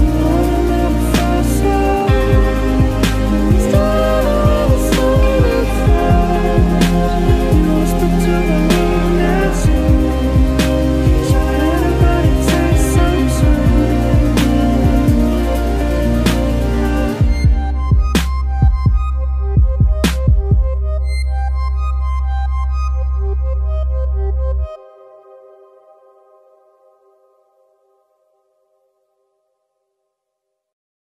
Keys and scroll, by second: 1.9 ctrl+z, 3.7 ctrl+s, 4.2 ctrl+z, 5.9 ctrl+z, 6.1 ctrl+z, 6.5 ctrl+z, 6.8 ctrl+z, 7.4 ctrl+z, 8.1 ctrl+z, 8.5 ctrl+z, 8.8 ctrl+z, 9.4 ctrl+z, 10.2 ctrl+z, 12.2 ctrl+s, 12.5 ctrl+d, 14.3 ctrl+Right, 14.5 ctrl+Left, 14.6 ctrl+Right, 15.2 ctrl+d, 15.8 ctrl+z, 16.6 ctrl+z, 16.9 ctrl+z, 17.2 ctrl+Up, 17.5 ctrl+Down, 17.8 ctrl+Up, 17.9 ctrl+Down, 18.3 ctrl+Down, 18.4 ctrl+Up, 20.7 ctrl+z, 21.3 ctrl+z, 21.8 ctrl+z.